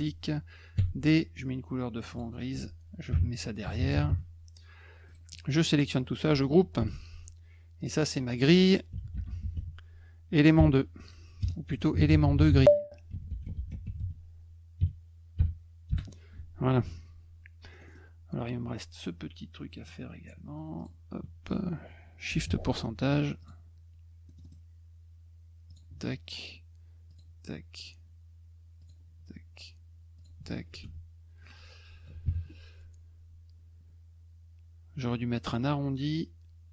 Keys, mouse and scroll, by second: 0.8 d, 2.1 click, 5.1 click, 5.3 click, 7.8 click, 8.0 click, 8.6-11.4 typing, 12.8-15.4 typing, 15.9 Return, 17.7 middle click, 17.8 middle click, 20.8 click, 22.4 shift+ù, 23.4 click, 24.3 middle click, 24.4 middle click, 25.7 click, 27.1 click, 28.8 click, 30.2 click.